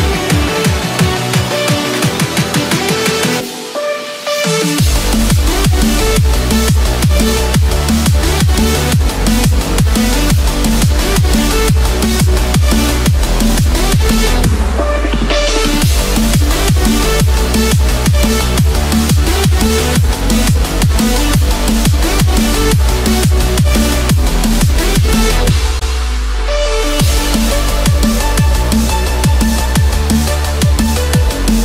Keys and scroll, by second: 3.2 Return, 3.7 Escape, 6.3 Return, 6.8 Escape, 9.5 Return, 9.6 Escape, 11.8 Return, 12.2 Escape, 14.4 Return, 18.4 Return, 18.9 Escape, 19.5 ctrl+-, 19.8 ctrl+0, 30.2 ctrl+z.